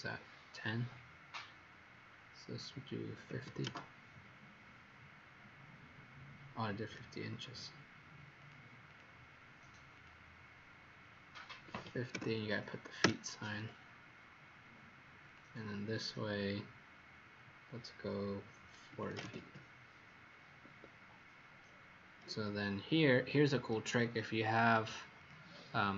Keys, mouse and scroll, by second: 3.2 KP_5, 3.3 KP_0, 7.4 ctrl+z, 8.5 click, 8.8 click, 9.8 click, 11.6 KP_5, 11.7 KP_0, 13.0 Return, 15.2 click, 18.9 KP_4, 19.0 KP_0, 19.3 Return, 20.6 Escape, 21.5-22.2 scroll down 3, 23.4 scroll up 1, 25.1 click.